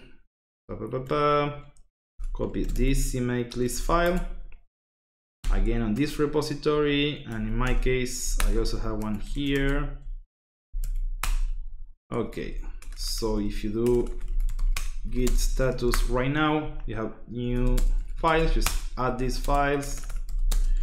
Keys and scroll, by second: 1.2-3.7 typing, 4.0 Tab, 5.4 ., 5.9 Return, 6.7 Up, 7.3-20.8 typing, 7.5 Escape, 8.2 Escape.